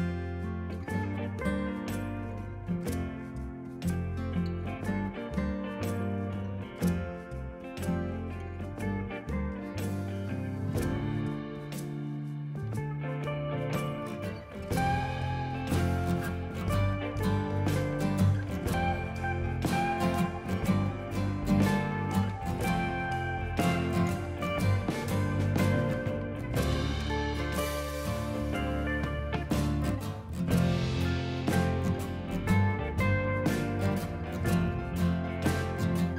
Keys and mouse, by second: 1.0 click, 4.3 a, 5.2 x, 5.5 click, 6.6 Escape, 6.8 click, 7.4 click, 7.6 ctrl+q, 7.8 click, 8.2 ctrl+e, 8.3 click, 8.8 ctrl+click, 8.9 right click, 9.1 click, 9.3 ctrl+shift+x, 9.5 click, 9.8 ctrl+click, 10.0 a, 10.3 s, 10.6 right click, 11.1 click, 11.6 ctrl+click, 12.3 a, 12.4 click, 14.8 ctrl+click, 15.2 ctrl+click, 15.4 click, 18.7 ctrl+c, 19.0 click, 19.3 ctrl+v, 20.1 click, 20.2 ctrl+1, 20.2 click, 20.5 right click, 20.8 click, 21.6 ctrl+shift+x, 22.3 click, 23.1 click, 23.6 ctrl+1, 23.7 click, 23.8 a, 23.9 click, 24.2 ctrl+click, 24.7 y, 24.9 right click, 26.1 click, 29.9 ctrl+shift+x, 30.0 click, 31.1 y, 31.5 click, 32.0 ctrl+1, 32.2 click, 32.4 ctrl+shift+x, 32.9 click, 33.5 ctrl+r, 33.9 click, 34.0 Escape, 34.3 click, 34.7 Escape, 35.2 click.